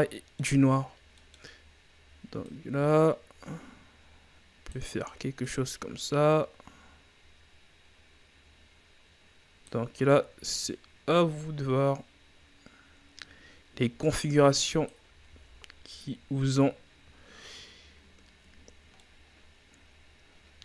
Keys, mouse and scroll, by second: 1.3-10.1 drag, 10.1-15.4 drag, 15.4 a, 16.0-16.7 scroll down 2, 16.7-17.1 scroll up 3, 18.6-19.0 scroll down 3, 19.0-20.6 middle drag.